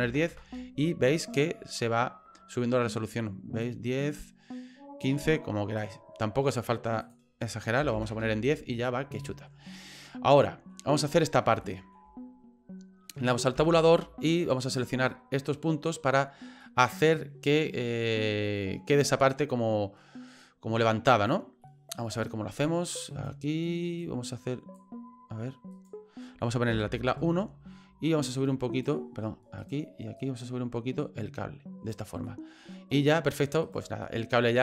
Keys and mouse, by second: 3.7-5.0 drag, 5.8 click, 7.0-8.4 drag, 9.2 middle click, 10.4 middle click, 11.6 shift+middle click, 13.6 Tab, 14.6 right click, 15.5 middle click, 16.6 middle click, 18.4 middle click, 18.9-20.3 middle drag, 21.1 right click, 21.6 middle click, 23.1 right click, 24.1 click, 25.7 right click, 26.7 KP_1, 28.4 click, 29.6 right click, 30.2-31.9 right drag, 32.2-33.5 middle drag, 33.6 right click, 34.0 middle click.